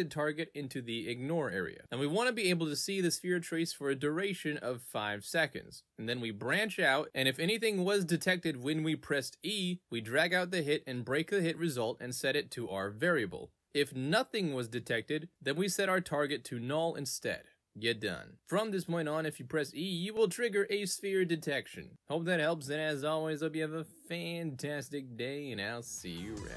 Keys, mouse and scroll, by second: 7.1 click, 8.8 click, 17.5 right click, 17.8-18.8 typing, 21.1 w, 23.2-26.5 typing.